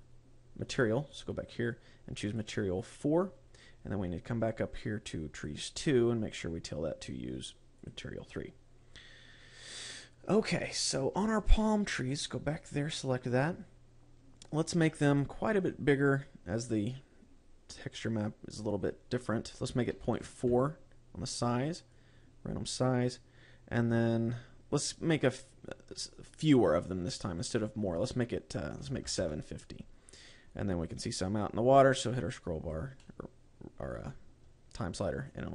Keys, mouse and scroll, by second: 1.5 click, 2.7 click, 3.3 click, 3.9-5.3 scroll up 14, 5.8 click, 6.2-7.1 scroll down 11, 8.3 click, 11.1-13.0 scroll up 13, 13.0 click, 13.7 scroll down 1, 14.9-16.1 scroll down 7, 18.4 click, 22.4 click, 23.5-24.5 scroll up 9, 25.9 click, 27.1 click, 27.9 click, 32.3 click, 33.5 middle click.